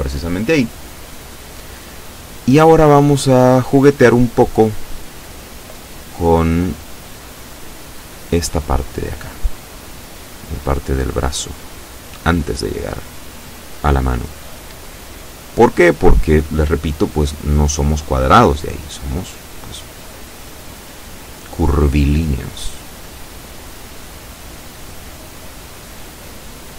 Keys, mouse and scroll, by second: 0.6-1.9 drag, 1.9-2.3 scroll up 1, 2.9 a, 3.4-4.9 drag, 5.0 shift+click, 6.0 shift+scroll up 1, 7.3 b, 8.1-9.1 drag, 10.0-11.5 drag, 11.6-13.3 middle drag, 13.7 shift+middle click, 14.5 shift+middle click, 16.1 click, 18.4 ctrl+r, 20.5 click, 21.1 click, 23.0-25.1 middle drag, 25.1 shift+middle click, 26.1 middle click.